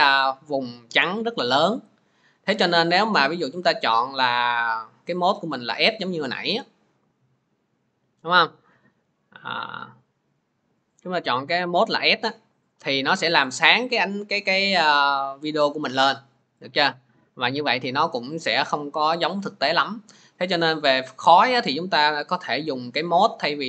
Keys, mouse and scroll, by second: 0.0 click, 4.5-22.5 drag, 12.8-23.4 middle drag.